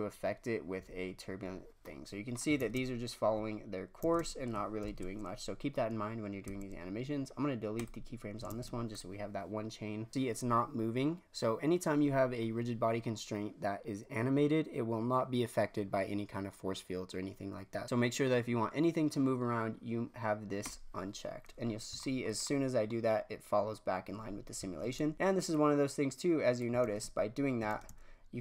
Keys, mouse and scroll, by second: 1.8-2.5 middle drag, 2.5 shift+space, 4.0 shift+space, 4.7 shift+Left, 6.4 x, 8.4 shift+space, 8.9 click, 10.1 shift+space, 20.6 click, 21.7-22.1 scroll down 4, 22.1-23.0 shift+middle drag, 23.0-23.3 scroll up 3, 24.8 shift+space, 25.5-26.8 drag, 26.8 shift+space, 27.7 shift+space.